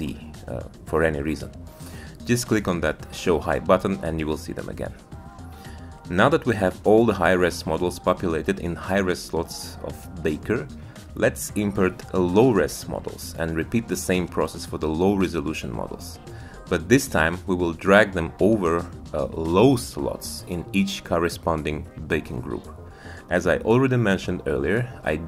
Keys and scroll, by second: 2.7 Tab.